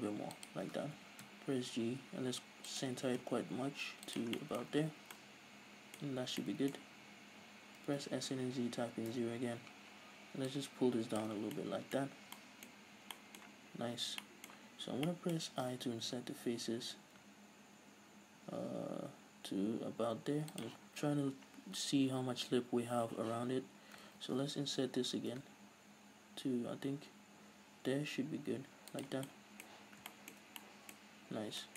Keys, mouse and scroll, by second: 0.5 shift+click, 1.0 g, 2.9 shift+click, 3.0 s, 4.2 shift+click, 4.4-11.2 middle drag, 4.8 z, 5.0 scroll down 1, 6.1-6.4 scroll up 1, 7.9 s, 10.5 Return, 11.2 click, 11.5 scroll down 1, 11.6-20.8 middle drag, 12.1-12.4 scroll up 2, 12.9 scroll up 2, 13.9 scroll up 1, 20.8 shift+click, 20.9 scroll up 1, 23.7-25.4 drag, 24.2 ctrl+z, 26.5-31.7 middle drag, 29.1 shift+click, 29.9 scroll up 2, 31.5 scroll down 2.